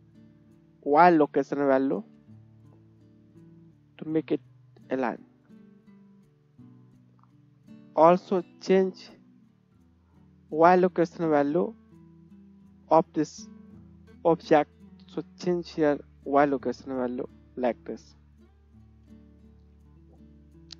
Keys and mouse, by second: 3.7 KP_1, 5.7 right click, 5.8-19.7 drag, 5.8 middle click, 6.2-7.0 middle drag, 6.2-7.0 right drag, 7.6 middle click, 7.6 right click, 8.2 middle click, 8.2 right click, 15.2-18.0 middle drag, 15.2-18.0 right drag, 18.3 KP_1, 19.7 shift+middle click, 20.0-20.7 shift+drag.